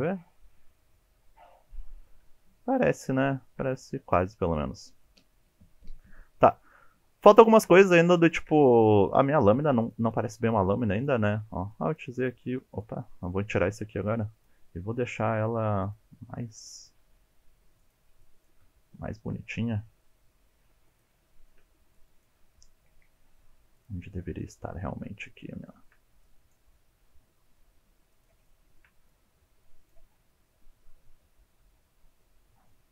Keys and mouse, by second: 0.1-1.8 shift+drag, 2.6 shift+click, 3.2 shift+middle click, 7.3 shift+click, 8.3 shift+click, 9.4 ctrl+r, 10.0 click, 10.4 1, 10.9 click, 11.3 alt+z, 11.8 click, 12.1 g, 14.2 click, 14.7 g, 15.8 click, 16.6 click, 17.0 g, 17.8 click, 18.2 click, 18.6 g, 20.8 click, 20.9 shift+middle click, 21.2 click, 21.4 g, 21.9 click, 22.2 shift+middle click, 22.7 shift+middle click, 22.9 click, 23.1 g, 23.6 click, 23.8 shift+middle click, 24.0 click, 24.6 g, 26.3 shift+middle click, 26.5 shift+middle click, 27.1 shift+middle click, 27.6 g, 28.4 click, 28.5 shift+middle click, 28.7 shift+middle click, 28.9 click, 29.1 g, 29.6 click, 29.7 shift+middle click, 30.1 click, 30.4 click, 30.5 g, 30.8 click, 30.9 shift+middle click, 31.1 shift+middle click, 31.3 click, 31.5 g, 31.7 click, 31.8 shift+middle click, 32.3 click, 32.5 g, 32.8 click.